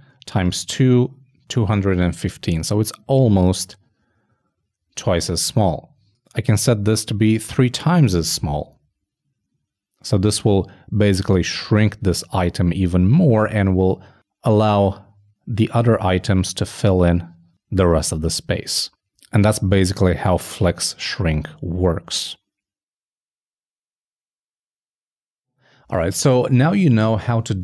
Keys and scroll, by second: 7.0 shift+Right, 7.6 shift+3.